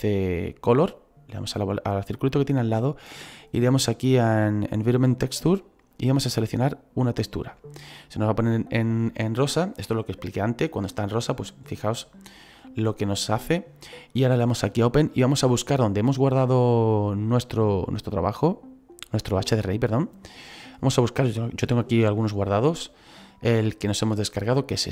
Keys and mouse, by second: 1.5 click, 5.9 click, 14.7 click, 17.8 click, 19.0 click.